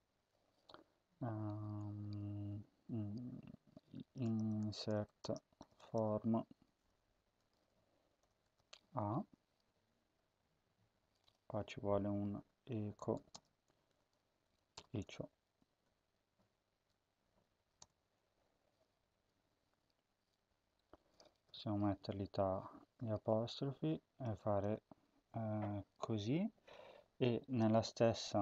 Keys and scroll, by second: 3.8-8.3 typing, 11.4 Tab, 12.0-14.6 typing, 14.3 Right, 15.7 shift+Right, 17.0 shift+Right, 17.6 BackSpace, 18.2-19.0 Right, 19.4-20.6 Left, 20.9 BackSpace, 21.3 [, 21.8 End, 24.0 typing, 25.2 ctrl+s.